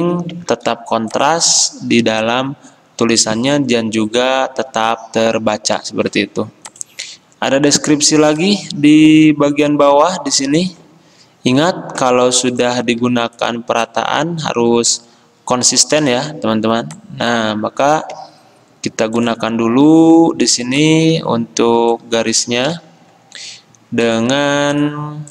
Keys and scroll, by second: 0.6 ctrl+z, 22.9 d.